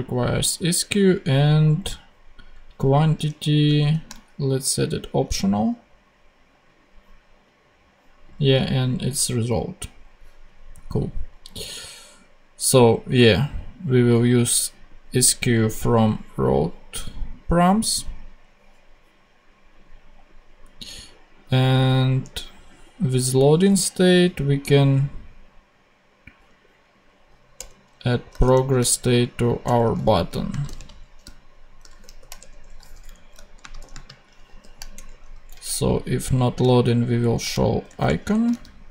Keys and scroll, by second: 3.7 shift+/, 5.2 ctrl+Tab, 23.5 super+c, 27.5 Return, 28.2 shift+Return, 28.4 shift+[, 29.6 shift+Return, 29.9 super+v, 30.4 shift+super+space, 30.6 shift+/, 31.9 shift+9, 32.3 shift+Return, 33.0 Down, 33.5 shift+space, 33.7 shift+;, 33.8 shift+space, 34.5 shift+9, 34.9 shift+Return, 35.8 Return, 35.9 Down, 36.5 alt+Down, 37.5 alt+shift+super+Up, 37.5 alt+shift+super+Left, 37.8 super+Tab, 38.2 Down.